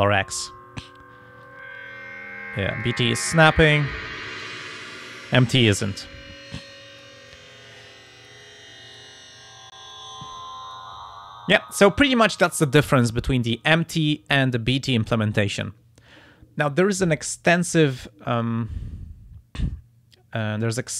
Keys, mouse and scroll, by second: 1.5-3.1 drag, 3.5 click, 4.4 click, 5.8-7.2 drag, 8.1-9.2 drag, 9.9 click, 17.7 click, 20.4 click.